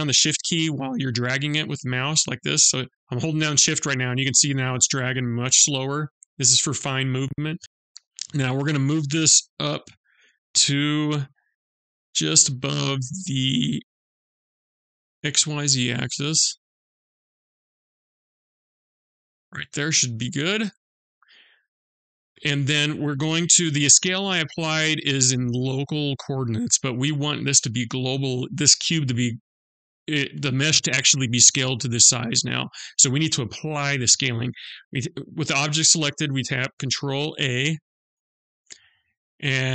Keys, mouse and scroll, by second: 7.6 middle click, 7.6-9.3 scroll down 5, 7.6 KP_Decimal, 9.3 g, 19.5 middle click, 20.7 scroll down 2, 21.5 middle click, 21.5 scroll down 2, 22.0-22.6 scroll up 1, 34.9 click, 36.9 ctrl+a.